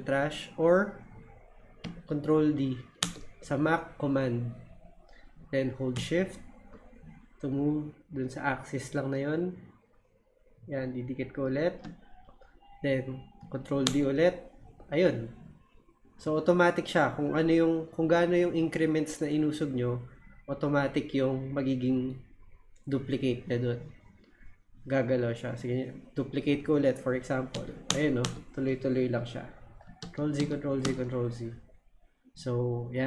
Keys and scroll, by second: 3.0 super+d, 13.8 super+d, 27.5 super+d, 30.0 super+z.